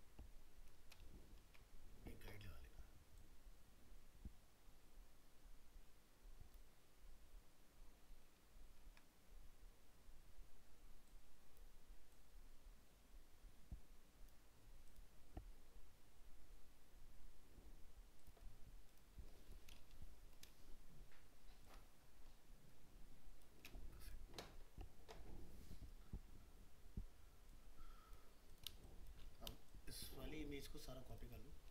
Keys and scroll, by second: 8.7 ctrl+z.